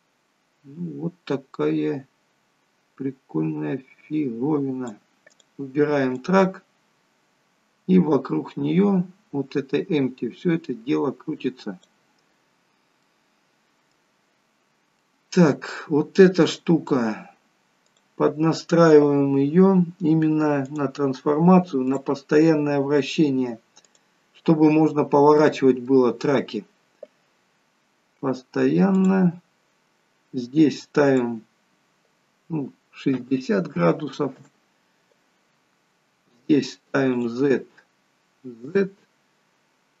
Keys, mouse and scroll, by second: 5.3 click, 6.1 click, 12.9 middle click, 16.4 click, 17.8 click, 21.9 click, 22.6-23.9 scroll down 2, 23.9 click, 24.9 scroll down 1, 25.4 middle click, 29.0 click, 31.0 click, 37.1 click, 39.2-40.0 scroll down 4.